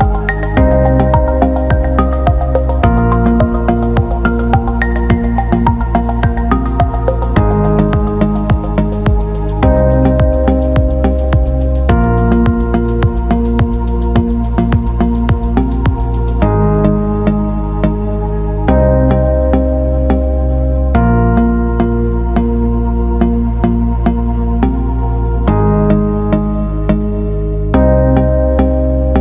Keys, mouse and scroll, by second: 0.0 alt+shift+middle click, 1.3 click, 2.1 alt+middle click, 2.7 alt+shift+middle click, 3.5 alt+middle click, 4.6 alt+middle click, 5.9 click, 6.1 click, 7.6 click, 12.0 click, 16.5-19.3 drag, 20.2-22.4 alt+middle drag, 22.9 click, 23.9 click, 24.3-25.6 drag, 26.0 alt+middle click, 26.9 click, 27.3 alt+middle click, 27.7 alt+shift+middle click, 28.0 alt+middle click.